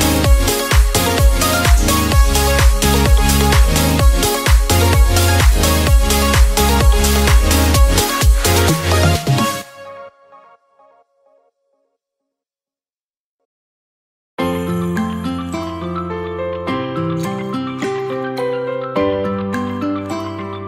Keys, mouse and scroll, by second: 0.7 click, 6.6 click, 9.1-10.9 middle drag, 10.9 ctrl+r, 12.9 ctrl+r, 14.3-15.4 middle drag, 15.4 ctrl+r, 18.3 ctrl+r, 20.3 ctrl+r.